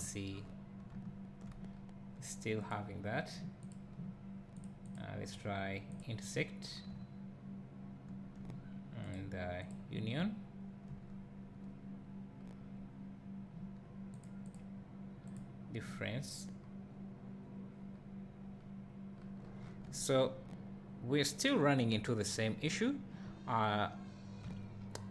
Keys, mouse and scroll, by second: 0.3 scroll up 2, 0.9 `, 1.7 scroll down 1, 3.7 click, 6.0-6.9 drag, 6.6 scroll down 1, 6.9 `, 9.7 click, 10.2 `, 10.7-25.1 drag, 11.0 scroll up 1, 12.0-12.4 scroll down 1, 12.7-15.3 scroll up 1, 16.6-16.9 scroll down 1, 16.9-18.5 scroll up 1, 18.5-19.1 scroll down 1, 19.4 scroll up 1, 19.6 scroll down 1, 19.9 `, 22.2-22.7 scroll up 2, 22.7 `.